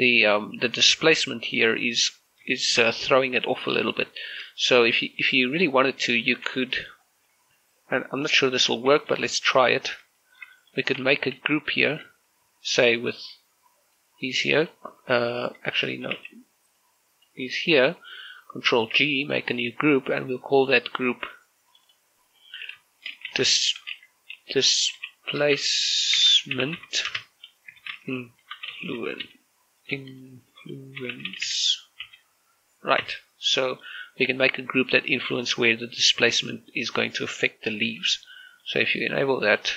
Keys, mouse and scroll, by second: 0.0 shift+middle click, 3.1 scroll down 1, 3.4 shift+middle click, 5.0 shift+middle click, 5.3-6.0 scroll up 2, 6.0 middle click, 6.6 scroll down 2, 6.8 shift+middle click, 7.1 scroll up 2, 7.2 Tab, 8.8 scroll down 2, 9.0 right click, 9.4 scroll down 1, 9.8 shift+middle click, 10.5 shift+middle click, 11.4 shift+middle click, 11.6 scroll up 1, 11.8 Tab, 12.2 a, 12.4-12.8 scroll up 1, 12.8 z, 13.2 c, 13.4 scroll down 1, 13.7-14.5 scroll up 1, 14.5 click, 14.9 right click, 16.4 scroll down 1, 16.6 a, 17.0 c, 17.6 click, 18.3 right click, 19.6 ctrl+g, 20.0 click, 20.4 Tab, 21.4 click, 23.8-30.7 typing, 31.8-32.2 typing, 33.8 Tab, 37.2 click, 38.6 z, 39.0-39.7 middle drag.